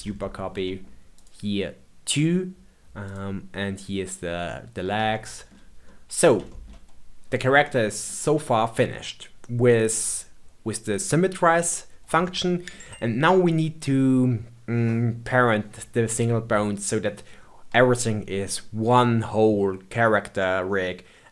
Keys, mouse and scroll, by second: 0.1-1.1 shift+middle drag, 1.1 click, 3.0 click, 5.1-7.1 shift+middle drag, 7.1-7.6 scroll down 4, 7.6-10.6 middle drag, 11.4-12.2 scroll up 2, 12.2-15.2 shift+middle drag.